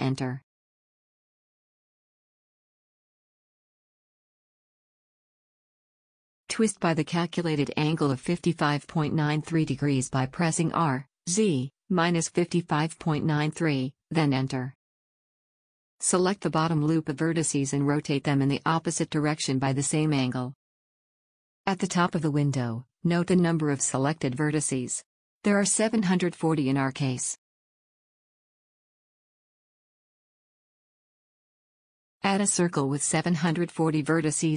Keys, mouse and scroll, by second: 1.9-3.5 middle drag, 5.6 middle click, 6.6 r, 12.8-15.5 middle drag, 15.5 a, 16.0-17.9 right drag, 17.6 r, 17.9 middle click, 23.8-25.7 middle drag, 26.9-28.8 middle drag, 29.5-31.3 middle drag, 31.6 shift+a, 34.1-34.5 drag.